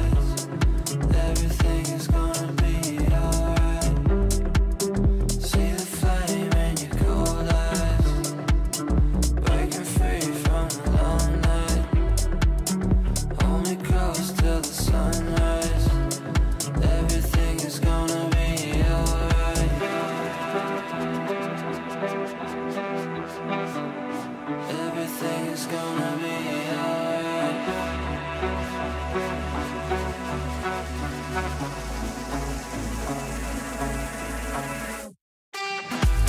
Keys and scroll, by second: 0.0 shift+Page_Up, 2.0 shift+F2.